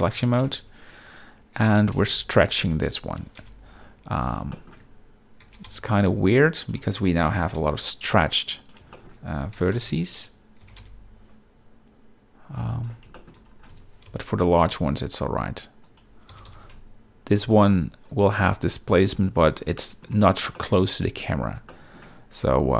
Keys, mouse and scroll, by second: 0.2 g, 0.4 z, 1.6 click, 1.9 s, 2.0 x, 3.0 s, 3.3 y, 4.5 shift+middle click, 5.4 g, 5.7 y, 6.6 click, 7.2 s, 7.5 y, 8.9 shift+middle click, 9.5 g, 9.7 x, 10.6 g, 10.8 y, 12.6 click, 13.1 shift+middle click, 13.7 s, 14.0 y, 15.8 click, 16.3 g, 16.5 y, 17.4 shift+click, 18.4 middle click, 19.5 z, 19.8 middle click, 20.1 Tab, 20.5 middle drag, 21.7 middle click.